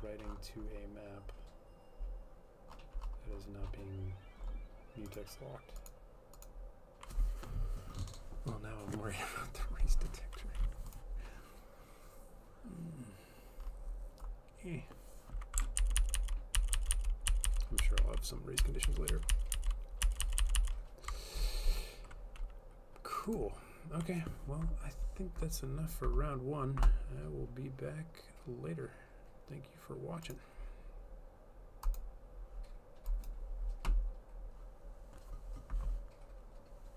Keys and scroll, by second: 16.0 ctrl+z, 16.1 ctrl+z, 16.3 ctrl+z, 16.8 ctrl+z, 16.9 ctrl+z, 17.1 ctrl+z, 19.2 ctrl+z.